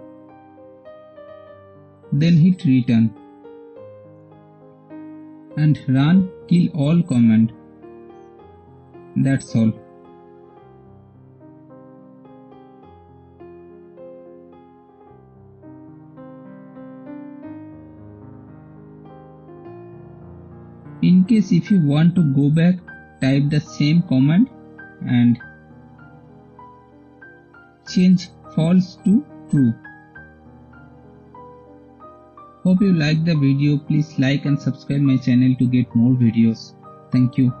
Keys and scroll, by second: 4.5 Return, 6.6-9.5 typing, 9.8 Return, 13.1 shift+super+3, 18.0 shift+super+3, 21.1 Up, 21.5 Left, 30.4-33.1 typing, 33.1 Return, 34.6 shift+super+3.